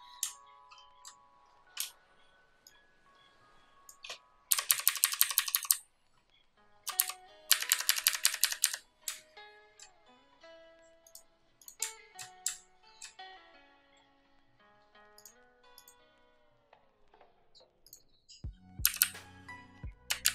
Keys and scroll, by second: 4.4 shift+Down, 4.9 Down, 5.1 Down, 5.3 Down, 5.4 Down, 5.6 Down, 6.9 Down, 7.4 Up, 7.6 Up, 7.8 Up, 7.9 Up, 8.1 Up, 8.3 Up, 8.5 Up, 18.8 Down, 18.9 Down, 20.1 Up.